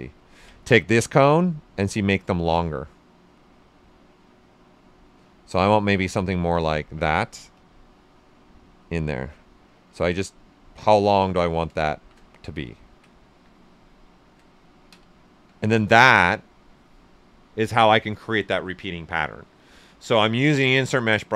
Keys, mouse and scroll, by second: 1.0-5.7 drag, 5.7-6.0 typing, 6.0 right click, 6.5 alt+right click, 7.5 click, 9.8-11.9 drag, 11.9 shift+f, 12.4 ctrl+right click, 13.2 q, 13.8 alt+right click, 14.5 ctrl+right click, 14.9 typing, 15.0 ctrl+right click.